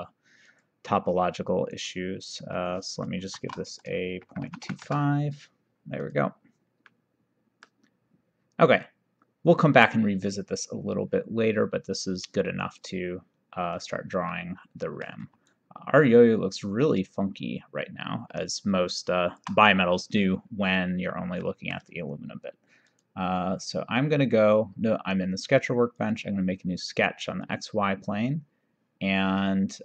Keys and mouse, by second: 0.6 click, 2.6 click, 3.4 shift+r, 4.5 KP_2, 4.7 KP_5, 6.1 click, 6.9 middle click, 12.7 click, 13.8 click, 14.4 middle click, 15.6 shift+right click, 21.5 middle click, 22.9 click, 26.0 click, 27.5 click.